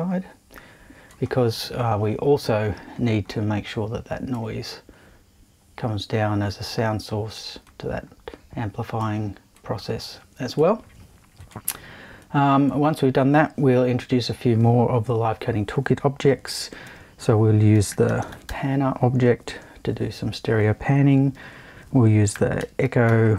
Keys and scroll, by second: 16.8 super+i, 17.7-20.0 typing, 21.3 super+i, 22.3 super+e, 22.6-23.3 typing.